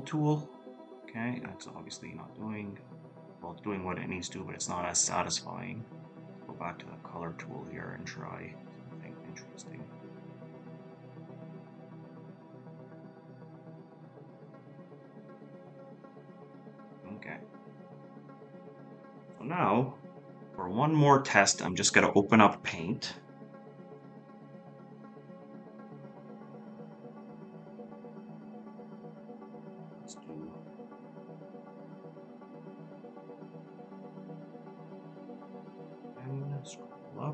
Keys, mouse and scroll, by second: 1.1 ctrl+z, 9.7 ctrl+z, 15.0 ctrl+z, 28.5 ctrl+z, 32.8 ctrl+z, 34.6-35.5 scroll down 1, 35.5-37.1 scroll up 1.